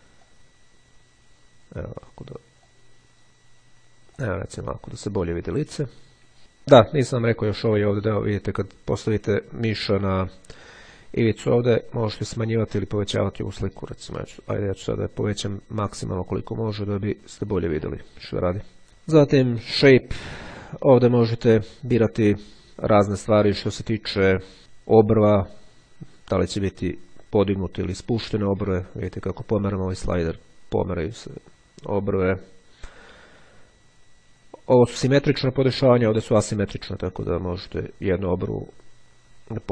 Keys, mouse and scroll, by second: 0.3-2.1 drag, 2.9-3.9 drag, 4.3-6.4 drag, 9.8-12.9 drag, 13.7 click, 16.2-17.7 drag, 20.3 click, 25.1-32.7 drag, 35.3-36.5 drag, 37.1-39.7 drag.